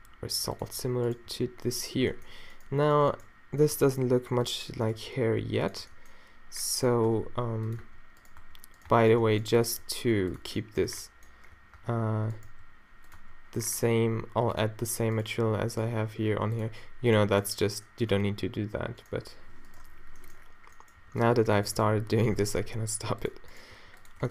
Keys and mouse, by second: 1.3 g, 3.7 g, 5.0 g, 5.8 Tab, 6.0 middle click, 7.1 Tab, 7.2 g, 7.8 Tab, 8.2 middle click, 8.4 Tab, 8.9 Tab, 9.2 Tab, 9.8 g, 10.9 Tab, 11.5 a, 11.8 Tab, 12.5 g, 13.2 Tab, 17.4 click, 18.2 Tab, 19.8 -, 20.5-22.0 middle drag, 21.0 g, 22.0 o, 22.7 g.